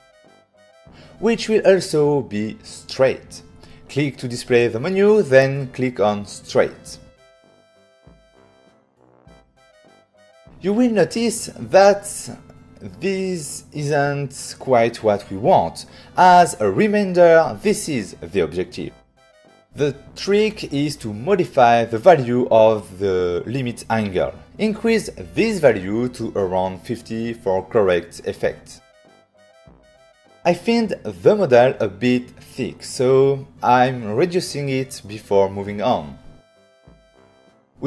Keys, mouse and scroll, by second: 4.5 click, 8.1 click, 17.6 click, 22.6 click, 23.9 click, 25.8 click, 27.1 click, 28.1 middle click, 31.0 click, 32.9 click, 35.0 click, 35.6 click, 35.7 click, 37.1 right click.